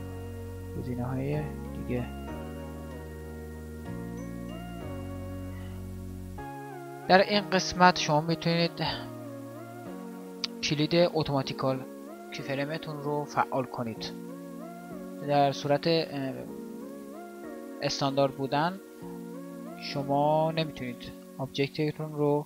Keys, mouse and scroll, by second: 21.2 g.